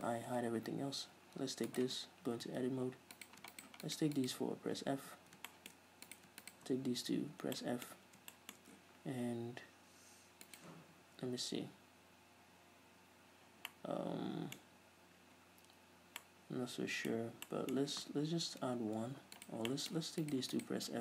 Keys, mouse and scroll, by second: 0.2 ctrl+i, 0.5-1.9 middle drag, 0.5 h, 1.9 right click, 2.0 Tab, 3.4 right click, 3.7 shift+right click, 4.0 shift+right click, 4.4 shift+right click, 5.2 f, 5.7-6.3 shift+middle drag, 6.3 right click, 6.6 shift+right click, 7.3 f, 7.8-10.7 middle drag, 10.7 right click, 13.9-19.7 middle drag, 18.6 ctrl+r, 19.7 right click, 19.9 middle click, 20.5 right click, 20.7 shift+right click.